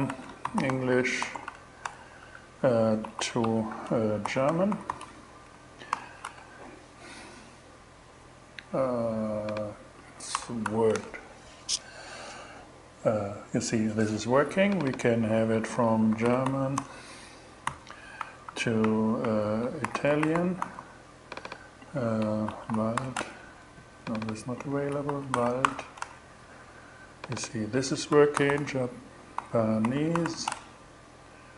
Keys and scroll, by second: 0.0-5.1 typing, 5.4 alt+shift+6, 5.7 alt+shift+Return, 6.6 shift+Return, 9.8 BackSpace, 10.1 w, 11.4 shift+Return, 15.0-17.1 typing, 17.6 alt+Right, 18.5 alt+shift+Right, 19.2-20.5 typing, 21.7-22.9 typing, 24.3-25.6 typing, 27.6-28.8 typing, 29.9 shift+e, 30.0 shift+Return.